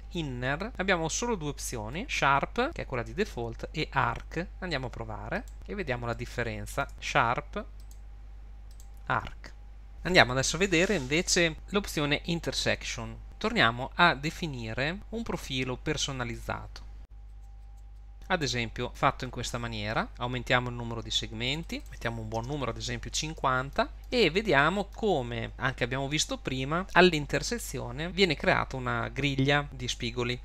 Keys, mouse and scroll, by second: 1.9 click, 6.1 middle click, 6.9 click, 7.8 click, 13.2 Tab, 13.2 click, 16.4 click, 21.5-21.8 click, 21.7 click, 23.4 middle click, 23.9 scroll up 4, 24.3 scroll down 1, 24.6 shift+middle click, 25.4 scroll up 1.